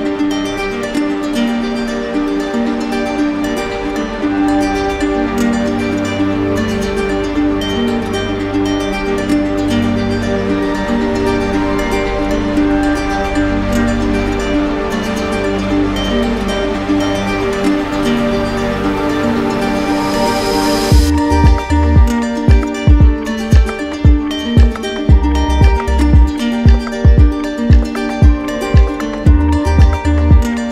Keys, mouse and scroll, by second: 0.7-3.6 right drag, 5.5-6.6 right drag, 6.7 right click, 7.3 click, 10.5-11.5 drag, 11.7-12.8 drag, 13.7-14.7 drag, 16.1-17.2 drag, 17.5-18.6 right drag, 18.8-20.2 drag, 21.0 right click, 22.1 shift+right click, 22.9 alt+right click, 24.3 w, 28.2-29.3 drag, 29.4 click, 30.3-30.7 right drag.